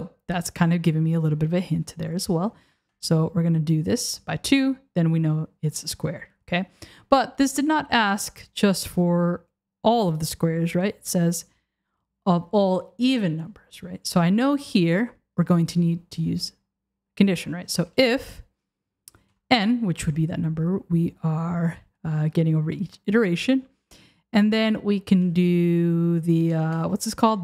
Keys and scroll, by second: 1.6 Left, 25.1 BackSpace, 26.5 BackSpace.